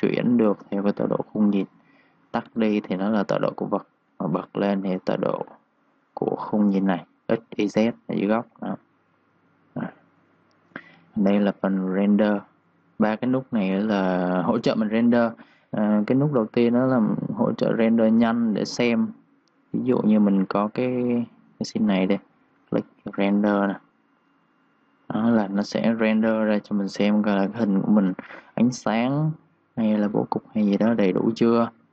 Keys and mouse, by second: 0.0-0.2 typing, 0.7 click, 1.9 z, 2.3 click, 8.1 ctrl+z, 8.8 click, 10.1-11.1 typing, 10.2 click, 11.4 click, 15.8 click, 20.2 v, 21.1 click.